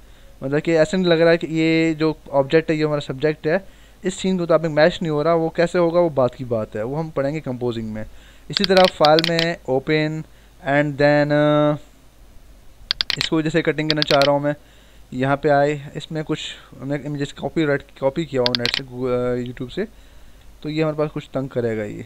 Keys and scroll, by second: 17.7 w.